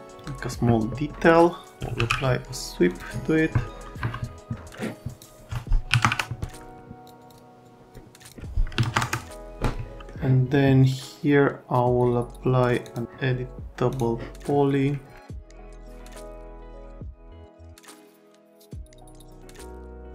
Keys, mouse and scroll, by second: 1.6-2.5 typing, 4.0 F3, 5.9 KP_1, 6.0 KP_Enter, 7.0 click, 7.2 click, 7.3 click, 7.6 click, 8.2 click, 8.7 KP_3, 8.8 KP_0, 12.8 click, 13.9 click, 15.4 click, 15.5 click, 15.8 Delete, 16.0 click, 16.1 click, 16.4 Delete, 16.6 click, 16.7 F3, 16.8 click, 17.0 click, 17.2 middle click, 17.5 click, 18.0 click, 18.7 click, 19.2 click, 19.4 alt+middle click, 19.6 alt+middle click, 19.7 middle click.